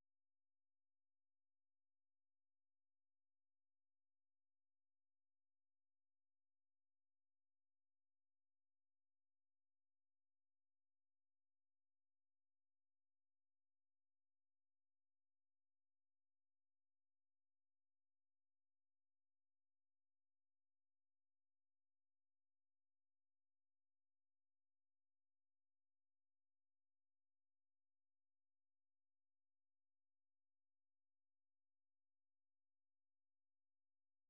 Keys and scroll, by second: 2.5 k, 5.3 ctrl+c, 6.2 super+2, 8.8 super+1, 9.8 o, 10.6 ctrl+v, 11.4-14.5 typing, 13.3 ctrl+[, 15.8 super+2, 16.1-16.8 typing, 18.8 typing, 31.2 typing, 33.8-34.2 typing.